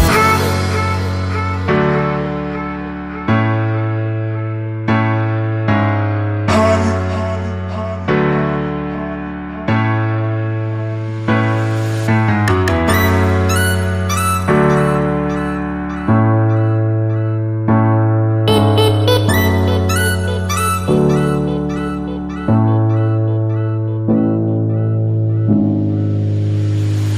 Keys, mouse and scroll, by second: 0.6 Return, 1.0 right click, 3.1 click, 9.5 Return, 10.4 click, 11.4 Tab, 12.5 click, 14.1 click, 14.7-15.8 scroll down 1, 15.8 click, 20.4 Return, 21.5 click.